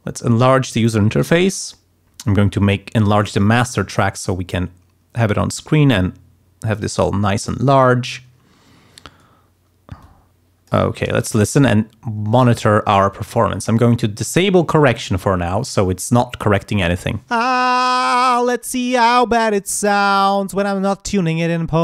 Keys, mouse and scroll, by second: 0.4 click, 1.1 right click, 1.6 click, 2.2-3.3 drag, 3.8-7.0 drag, 10.0 click, 11.3 ctrl+scroll up 2, 14.0 click, 17.3 space.